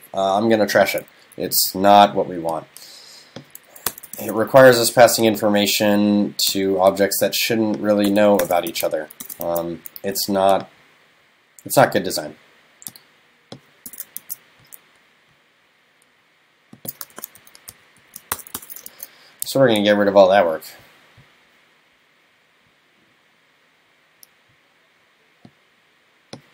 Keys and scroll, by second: 4.2 super+s, 8.7 super+s, 9.5 super+s, 14.2 super+s, 17.7 shift+super+Left, 18.9 super+s.